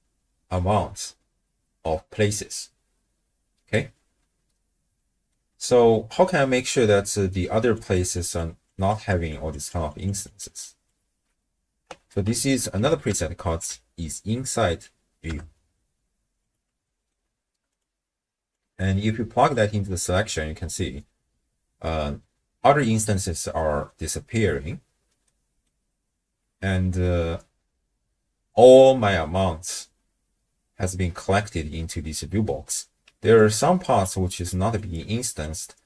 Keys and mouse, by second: 5.3 middle click, 5.4 click, 5.5 middle click, 7.5-11.3 typing, 7.8 click, 8.1 click, 8.7 click, 9.1 click, 9.5 click, 9.9 click, 10.3 click, 10.6 click, 12.1 ctrl+a, 16.8 middle click, 17.7 click, 18.5-19.6 drag, 25.3 middle click, 33.1-35.8 d, 33.4 click, 33.8 click, 34.3 click, 34.7 click, 35.2 click.